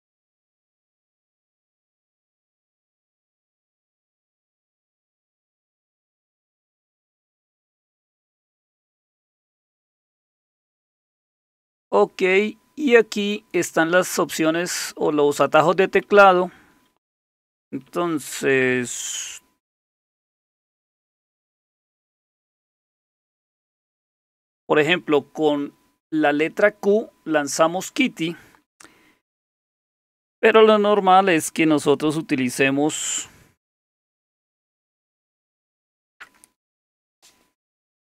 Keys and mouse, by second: 0.0 ctrl+d, 0.2 typing, 2.3-3.0 typing, 5.9-12.7 typing, 15.8-16.2 typing, 17.9 typing, 19.5-21.0 typing, 22.2-23.3 typing, 29.7 h.